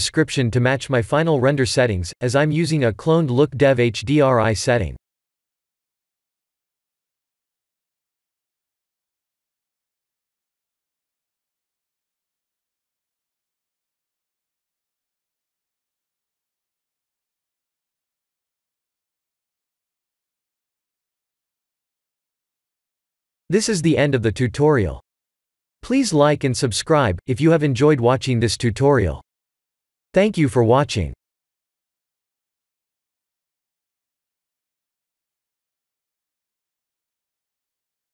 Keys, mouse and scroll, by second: 13.8 click, 14.2 click, 14.8 click, 16.3 click, 16.8 click, 18.4 click, 19.4 click, 21.7 click, 22.4 ctrl+s.